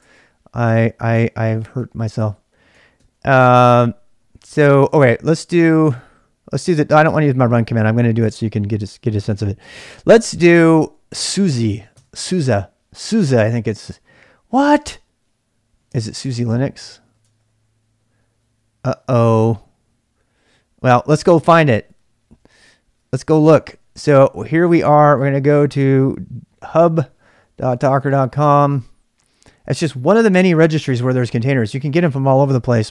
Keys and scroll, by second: 0.0-8.1 typing, 10.1-32.9 typing, 21.5 super+Tab, 22.3 super+Tab, 22.5 super+Tab.